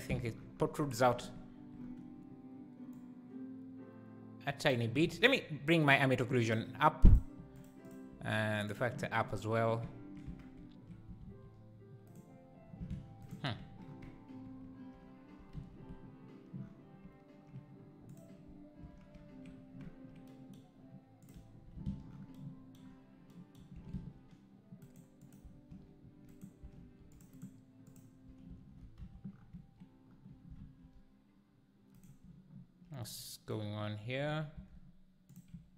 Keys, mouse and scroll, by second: 5.0 Tab, 7.6 click, 8.7 click, 10.2 Tab, 10.4-10.8 scroll up 2, 13.6 1, 13.9-14.4 scroll down 1, 15.7 z, 18.2 click, 18.8 ctrl+x, 21.3 click, 21.7 ctrl+x, 25.3 click, 27.1 ctrl+r, 28.0 click, 28.5 ctrl+x, 29.1 z, 29.3 scroll down 1, 34.7 z, 35.3 click, 35.5 `.